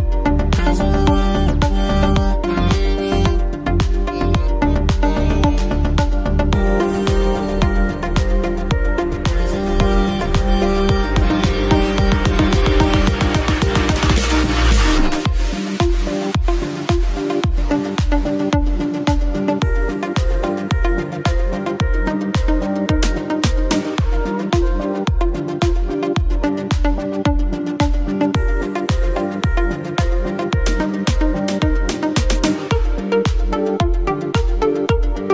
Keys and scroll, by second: 0.3 ctrl+v, 2.6 Return, 11.3 ctrl+c, 12.9 ctrl+v, 15.4-16.5 typing, 17.6 n, 18.0 space, 18.4 shift+;, 18.6 space, 21.0-24.8 typing, 26.6 BackSpace, 34.8 ctrl+c.